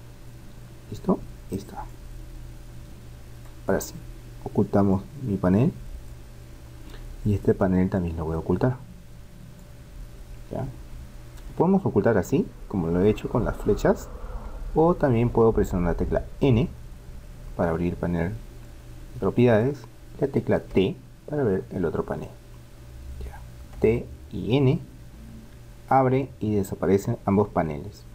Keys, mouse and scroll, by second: 1.9-3.7 drag, 3.9-6.7 drag, 7.9-9.6 drag, 10.1-12.8 middle drag, 16.5 n, 18.7-20.5 drag, 20.7 t, 23.8 t, 24.5 n.